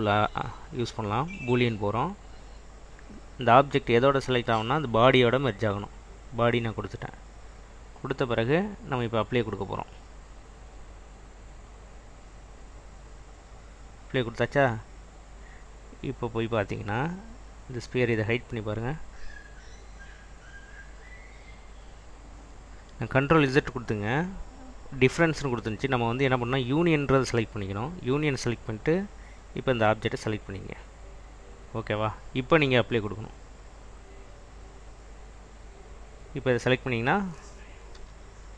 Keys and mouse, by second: 9.4-12.6 drag, 13.8 click, 14.6 click, 18.4 click, 19.9 click, 29.9 click, 33.5-34.8 drag, 35.8 click, 36.3 click, 38.0 /.